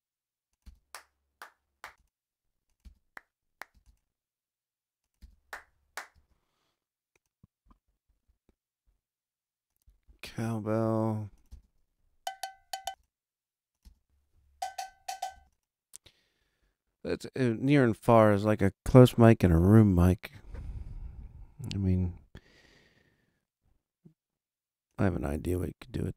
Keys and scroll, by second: 0.6 space, 1.8 space, 5.2 space, 11.5 space, 15.3 space.